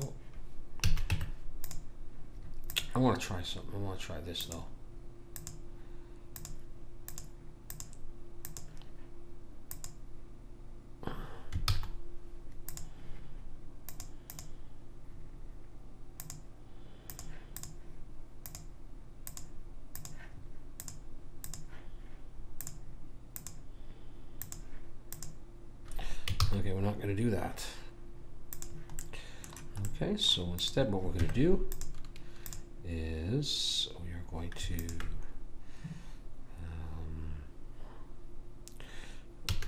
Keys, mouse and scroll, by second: 0.0 click, 0.8 a, 1.1 Tab, 2.6-10.3 drag, 11.7 ctrl+z, 12.6 click, 17.6 click, 20.0 click, 20.8-26.2 drag, 28.3 ctrl+z, 28.5 click, 29.0 right click, 30.5 middle click, 31.1 Tab, 34.2 click, 34.8 click, 39.5 a.